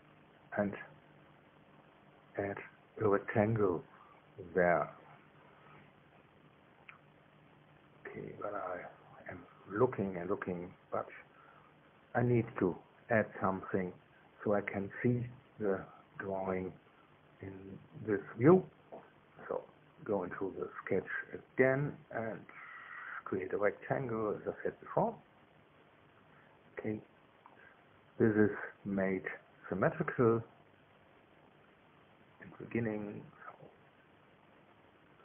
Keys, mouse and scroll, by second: 8.3 click, 10.2-14.5 drag, 16.9 middle click, 20.0 click, 20.8 click, 24.1 click, 25.8 click, 27.4 click, 29.3 right click, 30.8 click, 32.2 click, 33.2 click, 33.4-35.0 middle drag.